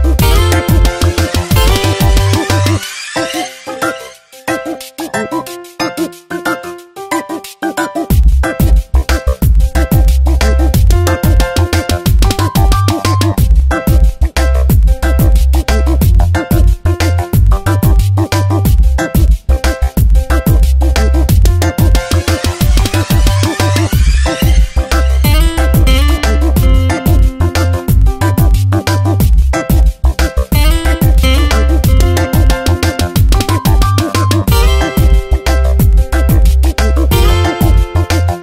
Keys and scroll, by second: 0.9 space, 2.2 s, 17.8 v, 19.1 ctrl+z, 20.6 s, 21.8 space, 22.5 s.